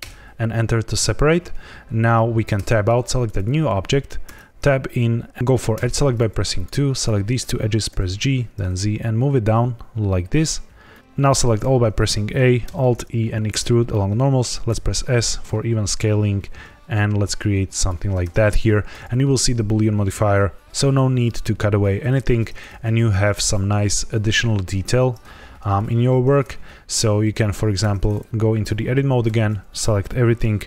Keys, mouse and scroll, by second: 2.5 Tab, 3.2 click, 4.2 Tab, 5.7 2, 6.5 click, 6.9 shift+click, 7.8 g, 10.8 click, 11.5 a, 12.6 alt+e, 14.6 s, 17.7 shift+click, 18.2 Tab, 27.7 Tab, 29.2 a.